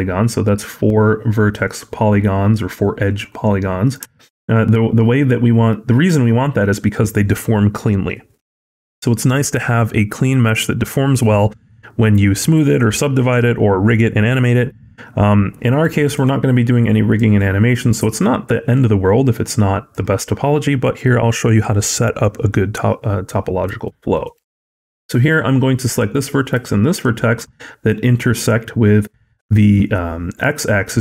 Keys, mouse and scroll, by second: 2.1-2.7 scroll down 1, 3.3 middle click, 4.0 shift+middle click, 4.2-5.0 scroll up 3, 5.0 middle click, 16.0 click, 18.7 click, 23.7 shift+middle click, 24.2 middle click, 25.7 click, 26.7 shift+click.